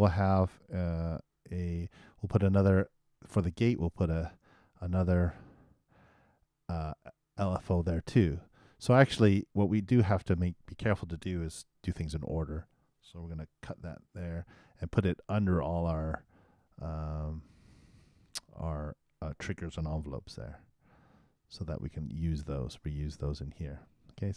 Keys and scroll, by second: 4.0 shift+0, 4.7 shift+;, 11.8 super+c, 14.0 super+x, 19.0 super+Return, 20.3 super+v.